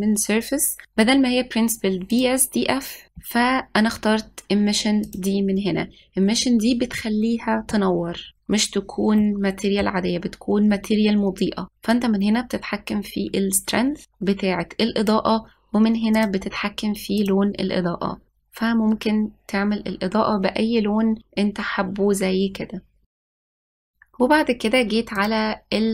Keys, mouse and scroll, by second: 3.0-4.2 drag, 10.0-12.3 middle drag, 12.8-14.2 drag, 17.0 click.